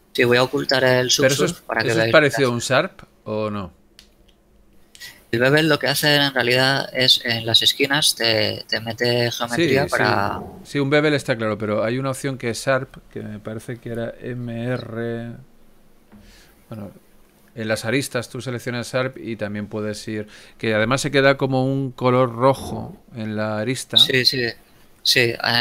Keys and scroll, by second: 16.3 z.